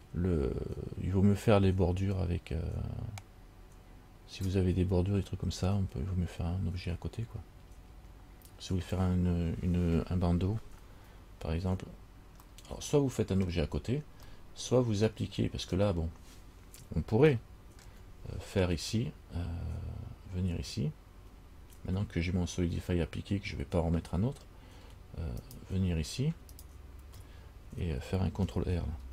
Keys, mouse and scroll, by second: 12.7 middle click, 14.5 middle click, 15.6-16.2 scroll up 4, 17.5 shift+middle click, 25.6 alt+right click, 26.8 alt+right click.